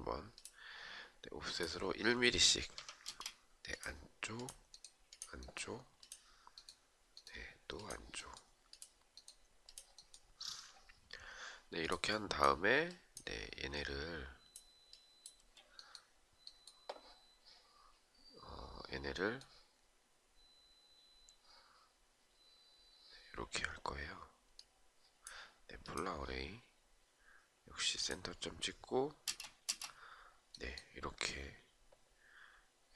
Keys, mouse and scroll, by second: 2.6 space, 12.5 shift+click, 13.3 shift+click, 14.5 shift+click, 28.8 space, 32.8 space.